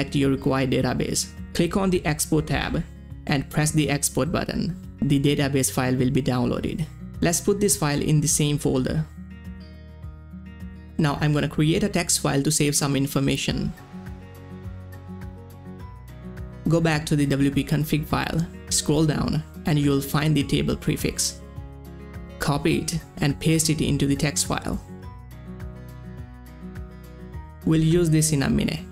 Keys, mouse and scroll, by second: 0.1 click, 1.8 click, 4.1 click, 4.1 click, 6.1 click, 6.1 click, 7.9 ctrl+x, 8.5 click, 9.4 ctrl+v, 10.4 click, 10.5 right click, 11.1 click, 12.3-15.4 typing, 15.1 click, 15.5 Tab, 16.5 click, 18.0-21.2 scroll down 1, 23.0 scroll down 1, 23.0-24.9 drag, 24.9 ctrl+c, 25.6 click, 27.3 ctrl+v, 28.3 click, 28.6 Tab.